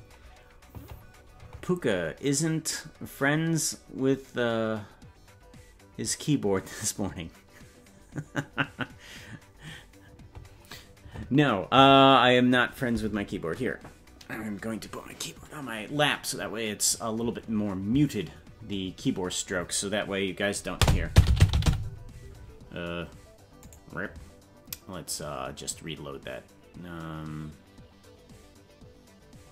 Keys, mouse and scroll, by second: 21.1 n, 21.1 j, 21.2 g, 25.0-29.5 drag.